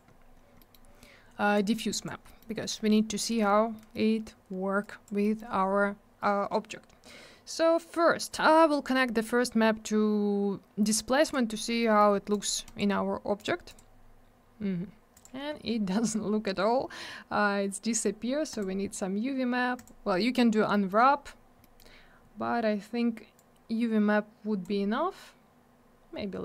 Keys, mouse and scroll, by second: 0.1 scroll up 1, 0.6 middle click, 0.7 middle click, 1.5 click, 2.3 middle click, 2.4 middle click, 3.7 middle click, 3.9 middle click, 4.8 click, 5.2 middle click, 5.4 middle click, 8.1 middle click, 8.3 middle click, 8.8 click, 11.8 middle click, 12.0 middle click, 12.3 click, 12.4 double click, 12.6 right click, 12.7 right click, 13.4 click, 13.4 click, 13.7 click, 13.7 click, 15.5 Tab, 15.9 scroll up 1, 18.5 click, 18.6 click, 19.8 click, 19.8 click, 20.4 scroll down 1, 20.7 middle click, 20.9 middle click, 21.1 scroll up 1, 21.6 middle click, 21.8 middle click, 23.3 click.